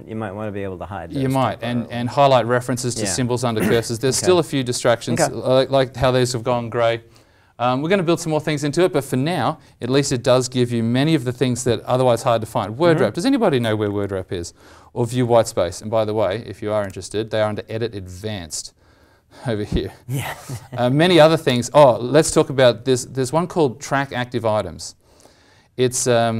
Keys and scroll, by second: 4.4 alt+Tab.